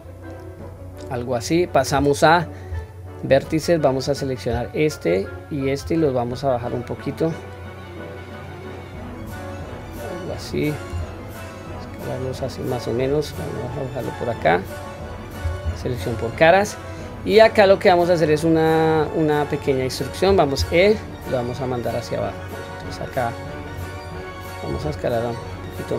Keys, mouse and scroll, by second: 0.0-1.2 middle drag, 1.4 middle click, 2.7 1, 3.9 click, 5.2 shift+click, 6.0-9.6 drag, 13.8-15.0 drag, 15.6 3, 16.0 click, 16.4-18.3 middle drag, 18.8-20.1 middle drag, 20.5 e.